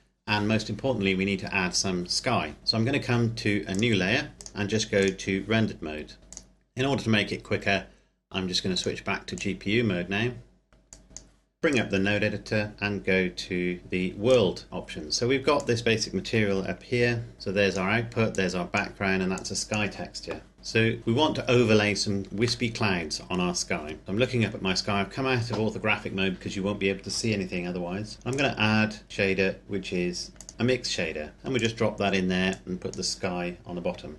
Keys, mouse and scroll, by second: 3.7 click, 6.3 click, 8.7 click, 12.4-13.7 scroll up 1, 14.2 click, 14.7-15.7 scroll up 1, 15.7 click, 16.6-17.3 typing, 17.4 click, 18.8 click, 19.6 click, 20.7 click, 22.5 middle click, 23.3 scroll down 1, 24.0 middle click, 28.2 click, 30.3 click, 31.5 click.